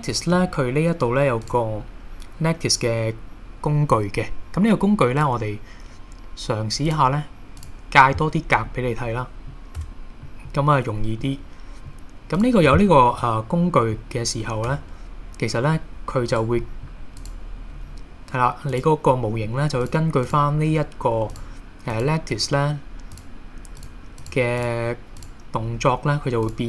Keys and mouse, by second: 0.1-0.5 middle drag, 5.3 click, 7.0 click, 8.7-9.2 middle drag, 9.8 Tab, 10.3 middle click, 11.3 middle click, 12.4 click, 13.2-14.0 middle drag, 14.7 g, 16.3 right click, 16.7 middle click, 17.2 click, 18.6 g, 18.7 click, 19.2 middle click, 20.7 g, 21.3 click, 22.0 click, 22.4 g, 23.1 click, 23.8 click, 24.2 click, 24.6 click, 25.6 g, 26.5 click.